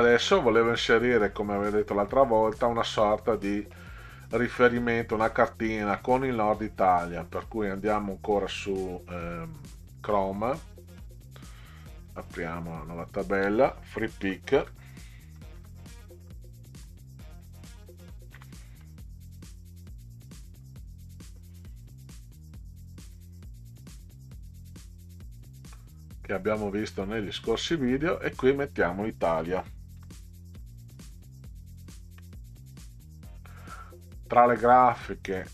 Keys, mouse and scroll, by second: 3.0-3.7 middle drag, 5.7-6.1 middle drag, 8.3 click, 12.1 click, 13.0 click, 14.3 f, 15.4 e, 15.6 e, 16.3 è, 16.8 i, 18.4 x, 20.9 click, 23.1 click, 28.3 click, 30.0-31.8 typing, 32.1 KP_Enter, 34.7-35.5 scroll down 2.